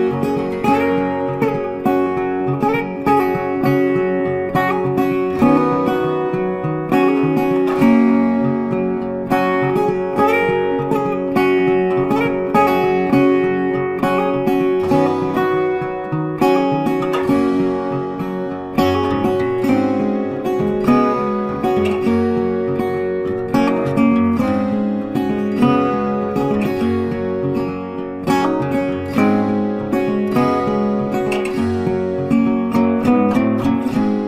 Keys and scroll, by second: 13.2 ctrl+t, 24.3 ctrl+t.